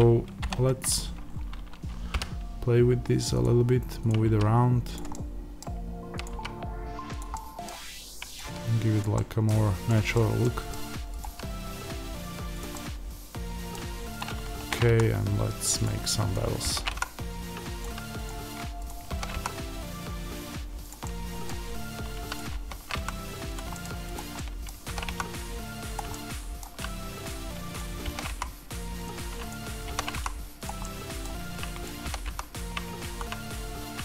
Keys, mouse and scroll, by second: 0.6-1.1 scroll down 1, 1.2 scroll up 1, 2.0 g, 3.3 click, 4.2 g, 4.9 click, 5.0-6.1 middle drag, 6.1 click, 6.2 g, 7.1 click, 7.2-8.3 middle drag, 8.3 click, 8.3 g, 8.9 click, 9.1-11.1 middle drag, 10.6-11.1 scroll, 11.1 click, 12.5 click, 12.6-14.1 middle drag, 14.1 click, 14.5 ctrl+b, 15.7 click, 16.5 ctrl+b, 17.7 click, 19.0 ctrl+b, 20.9-22.2 middle drag, 22.2 click, 22.4 ctrl+b, 23.4 middle click, 23.4 click, 23.9 click, 24.3-27.2 middle drag, 24.8 ctrl+b, 25.8 click, 27.2 click, 28.0 ctrl+b, 29.0 click, 29.8 ctrl+b, 30.6 click, 30.7-31.8 middle drag, 31.8 click, 31.9 ctrl+b.